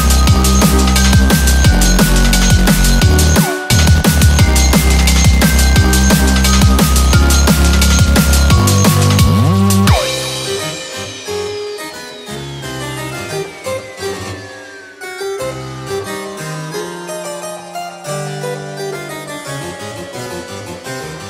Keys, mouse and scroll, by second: 0.0 middle click, 0.6 middle click, 1.0 shift+middle click, 1.1 shift+middle click, 1.5 click, 1.8 scroll down 2, 2.0 middle click, 3.7 click, 6.8 ctrl+s.